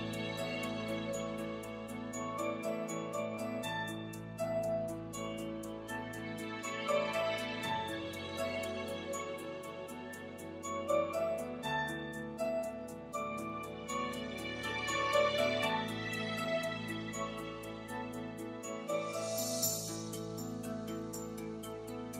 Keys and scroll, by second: 4.0 |, 4.3 ., 5.6 Return, 11.5 3, 15.5 i, 15.8 Home.